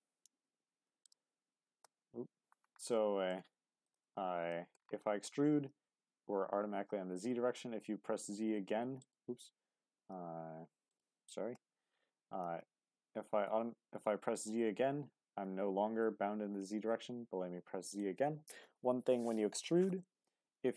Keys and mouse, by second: 0.3 g, 1.0 click, 1.8 ctrl+z, 2.9 middle click, 3.8 shift+click, 4.5 middle click, 5.0 middle click, 7.4 s, 9.0 right click, 9.9 g, 10.1 z, 10.9 click, 11.5 ctrl+z, 12.3 e, 13.5 z, 16.5 z, 17.9-19.5 drag, 20.6 e.